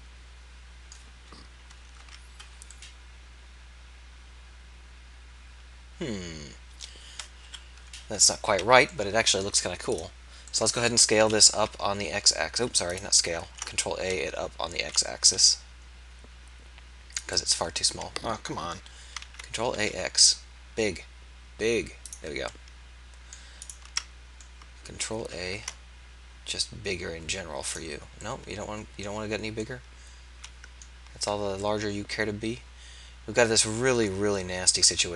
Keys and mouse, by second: 2.0 z, 7.5 KP_3, 8.6 z, 11.5 s, 13.6 ctrl+a, 19.2 ctrl+a, 22.8-25.6 drag, 25.6 ctrl+a, 31.3 z, 34.8 Tab.